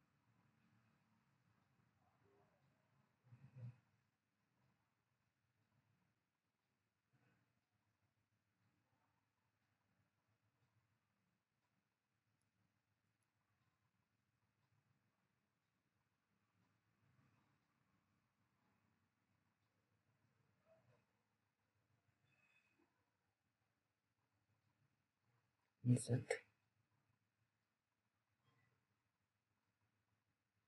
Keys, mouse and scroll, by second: 4.7-6.0 scroll up 1, 6.0 click, 6.1 click, 6.5-7.0 scroll up 1, 7.0 click, 7.4-8.1 scroll up 1, 9.1 click, 13.4 click, 15.6-17.0 scroll up 1, 17.0 click, 18.7 scroll up 1, 18.9-19.3 scroll down 1, 23.2 click, 24.5-25.6 scroll up 1, 25.6 click, 25.6 click, 28.0 middle click.